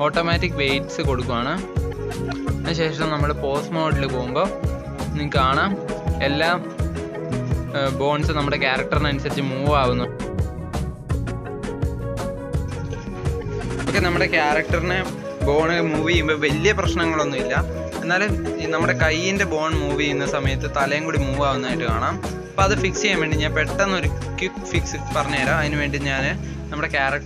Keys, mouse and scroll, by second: 0.0-0.4 middle drag, 0.4 click, 1.1 KP_1, 1.7 r, 2.9 click, 3.1 r, 4.2-4.8 shift+middle drag, 4.8 r, 7.1 click, 7.4 r, 9.2 click, 9.5 r, 10.6 click, 10.9 r, 12.1-12.7 shift+middle drag, 12.7 click, 13.4 r, 14.6 click, 14.9 r, 15.8 click, 16.0 r, 17.1 click, 17.4 r, 18.2 r, 19.7 shift+middle click, 20.1 r, 20.6 click, 20.8 r, 23.2 click, 23.5 r, 24.7 click, 26.0 Tab.